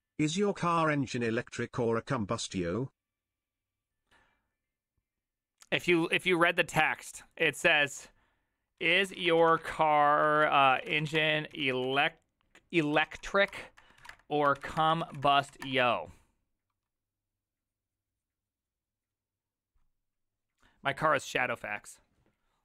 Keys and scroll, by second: 9.2-16.1 typing.